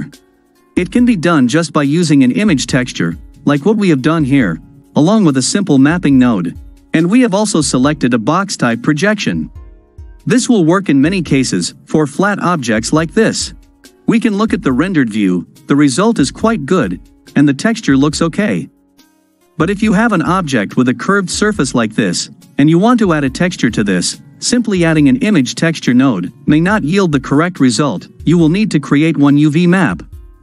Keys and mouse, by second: 9.5-10.7 drag, 10.7 middle click, 11.0 click, 14.7 click, 16.0-18.9 middle drag, 21.7-22.6 middle drag, 22.6-22.9 drag, 22.9-29.5 middle drag.